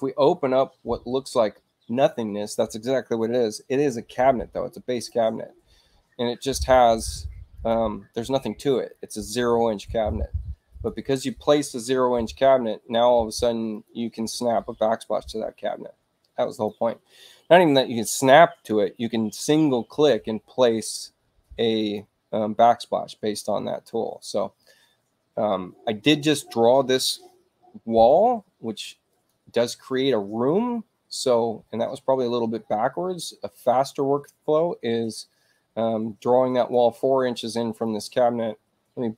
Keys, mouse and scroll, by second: 4.9 click, 7.0 click, 7.5 click, 8.9 click, 10.7 click, 13.7 click, 15.2-16.7 drag, 21.8 click, 28.5 space, 29.1 click, 33.7 click, 36.1 space, 36.6 click, 37.8-39.1 drag.